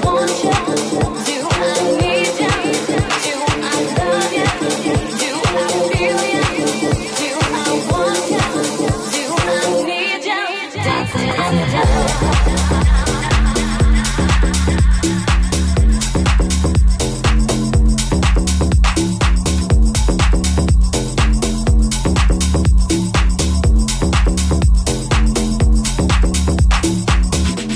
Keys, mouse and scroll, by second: 2.9 ctrl+r, 4.9 ctrl+r, 6.9 ctrl+r, 7.5 ctrl+r, 11.9 Tab, 12.3 w, 13.8 /, 15.9 middle click, 17.4 middle click, 18.5 right click, 18.8-23.4 middle drag, 21.0 Tab, 23.4 right click, 23.4 alt+middle click, 23.8 alt+right click, 23.8-27.7 alt+middle drag, 24.7 ctrl+b.